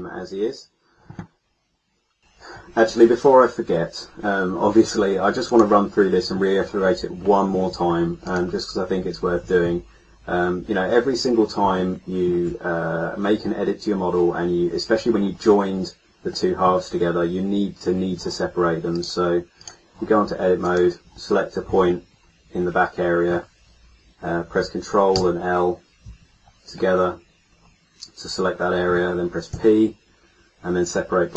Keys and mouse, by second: 5.7 middle click, 8.2-11.8 middle drag, 16.3-17.8 middle drag, 20.6-21.9 middle drag, 25.1 ctrl+l, 29.5 p.